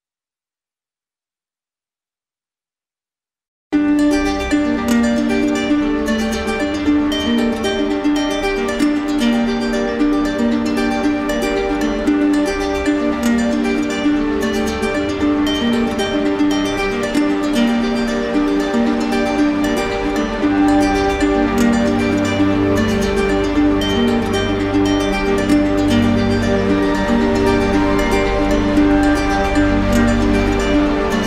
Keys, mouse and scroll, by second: 4.1-5.3 drag, 4.4 ctrl+z, 9.0 click, 12.0 ctrl+click, 12.1 ctrl+z, 14.2 ctrl+click, 14.3 ctrl+z, 17.9 click, 18.3 ctrl+z, 21.2 middle click, 21.4 middle click, 21.4-22.0 scroll, 22.0-23.2 scroll up 5, 29.3 scroll down 1, 29.4 scroll, 29.7-30.7 scroll down 2.